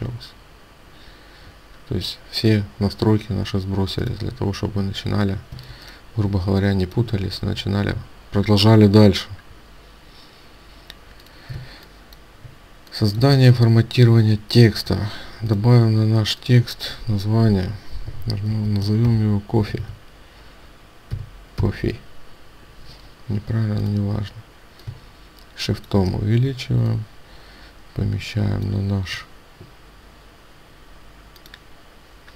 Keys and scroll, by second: 5.5 ctrl+space, 11.5 ctrl+space.